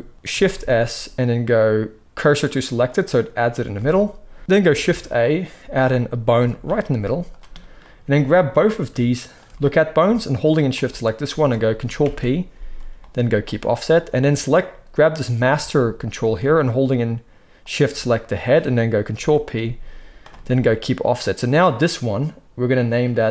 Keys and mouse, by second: 0.5 shift+s, 3.7 alt+a, 4.8 shift+a, 6.0 click, 6.3 g, 8.5 click, 9.2 shift+click, 10.4 shift+click, 10.7-14.4 middle drag, 11.9 ctrl+p, 14.4 click, 14.4-18.6 middle drag, 19.0 ctrl+p, 21.4 click, 23.1-23.3 drag.